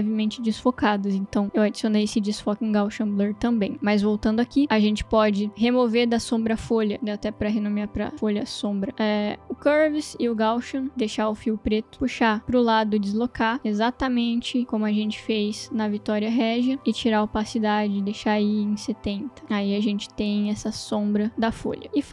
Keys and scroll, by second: 7.2 Return, 7.4 Right, 7.9-9.4 typing, 10.9 Delete, 17.4-19.2 typing, 19.6 Return.